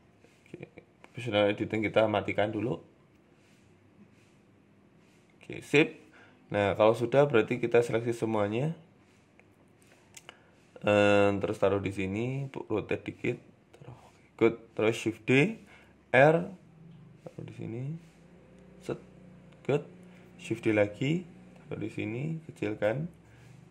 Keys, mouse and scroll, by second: 0.0 click, 0.4 scroll up 3, 0.6 shift+middle click, 1.9 o, 2.4 g, 3.4 click, 3.6 g, 5.0 Tab, 5.0 scroll down 4, 5.2 middle click, 6.8 Tab, 7.4 KP_7, 7.8 Tab, 9.0 s, 9.9 KP_3, 10.2 Tab, 10.6 a, 10.9 g, 12.0 r, 14.1 KP_7, 14.5 scroll up 4, 14.8 shift+middle click, 15.4 shift+d, 16.1 r, 16.9 g, 19.9 s, 20.0 shift+d, 20.9 r, 23.1 s, 23.1 s.